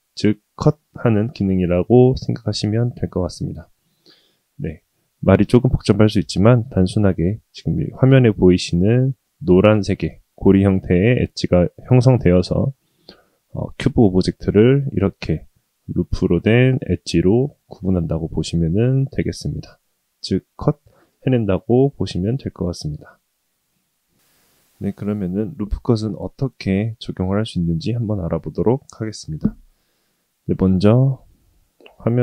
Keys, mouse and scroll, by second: 15.6-20.4 middle drag, 21.5-23.4 middle drag.